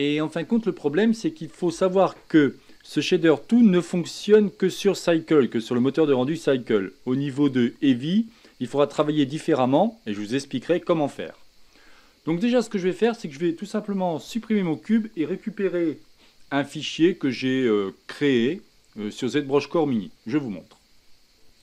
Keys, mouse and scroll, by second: 14.2 x.